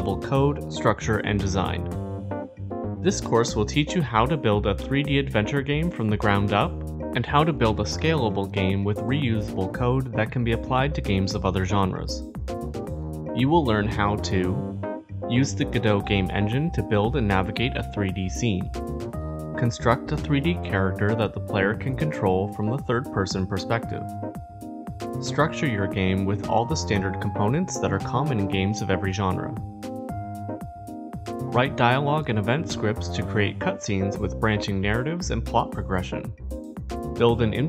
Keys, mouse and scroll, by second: 0.0 Up, 0.1 ctrl+s, 0.6-2.5 drag, 8.6-9.5 scroll, 9.9 click, 10.3 click, 14.8 click, 15.1-15.4 typing, 18.7 click, 18.7 shift+s, 18.8 middle click, 18.8 click, 19.3 click, 19.5 middle click, 19.6 middle click, 20.4 right click, 20.4 scroll, 20.5 click, 21.1 click, 21.6 click, 21.9 click, 22.1 click, 22.4-23.6 typing, 23.5 click, 23.8 click, 25.0-26.9 typing, 25.4 click, 26.5 click, 36.2 click, 36.2 scroll.